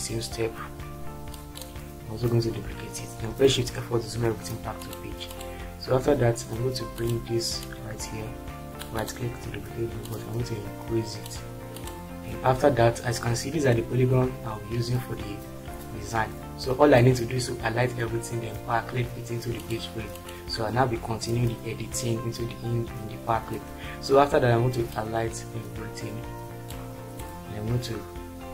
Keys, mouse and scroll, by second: 0.6-2.6 drag, 3.3 shift+F4.